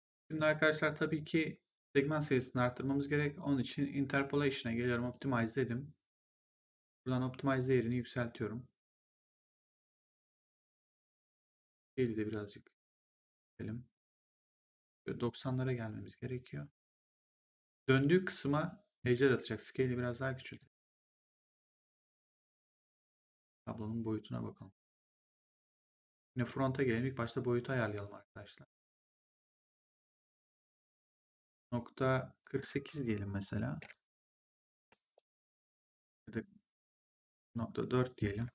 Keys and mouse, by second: 0.0 click, 4.9 click, 6.8 click, 11.6 click, 13.9 click, 20.5 click, 26.3 right click, 26.9 click, 29.0 click, 31.9 click, 33.7 4, 34.3 8, 35.1 Return, 37.2 click, 38.4 BackSpace.